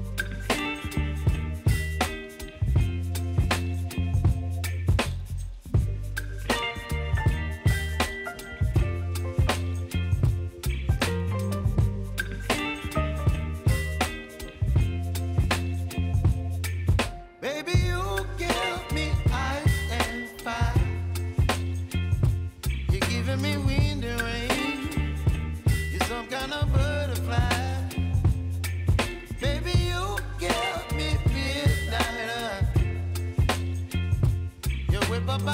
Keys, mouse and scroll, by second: 0.0-0.7 typing, 1.5 click, 13.1 ctrl+Num_Lock, 13.1 click, 13.5 ctrl+n, 13.6-15.1 typing, 16.1 click, 17.9 Return, 19.1 click, 22.2 s, 23.2 click, 24.2 typing, 28.5 click, 30.6 Return, 32.9 click, 33.9 Return, 35.3 click.